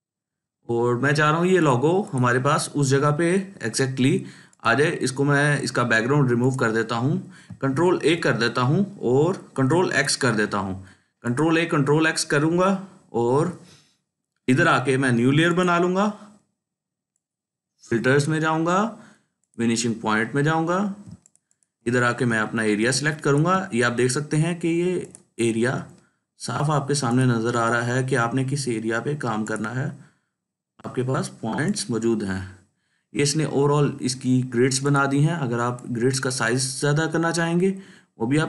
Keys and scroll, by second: 7.7 ctrl+a, 9.5 ctrl+x, 21.0 ctrl+space, 21.5-22.0 ctrl+space, 22.7 ctrl+space, 23.2-26.1 ctrl+space.